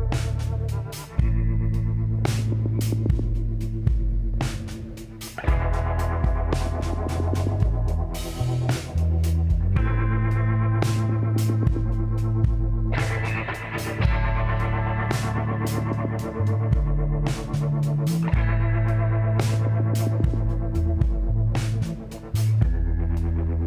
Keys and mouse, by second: 2.6-4.0 drag, 4.0 middle click, 4.3-7.2 drag, 7.5-10.0 drag, 10.3-12.0 drag, 12.2-14.0 middle drag, 15.4-17.1 drag, 17.1 middle click, 18.0 click, 19.0 l, 19.6 click, 20.6 e, 21.9-23.6 drag.